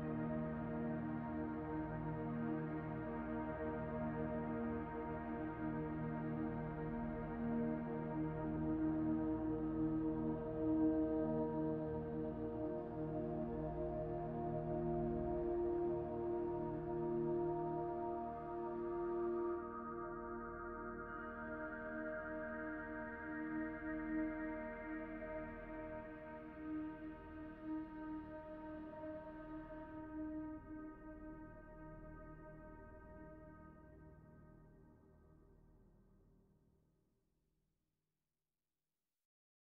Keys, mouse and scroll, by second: 0.4 middle click, 1.7 click, 3.4 middle click, 3.9 scroll up 1, 4.0 middle click, 5.9 middle click, 6.5 scroll down 1, 6.5-7.7 scroll up 5, 7.7 click, 10.1 click, 13.0 click, 19.1 click, 19.5 click, 21.4 middle click, 22.1 click, 23.1 middle click, 24.0 click, 24.2-24.6 scroll down 8, 24.7 click, 25.9 middle click, 27.5 scroll down 2, 27.6 scroll up 1, 30.1 middle click, 30.4-30.8 scroll up 2, 31.3 scroll down 1, 32.5 middle click, 32.7 scroll up 2, 32.9 middle click, 34.7 scroll down 3, 38.3 click.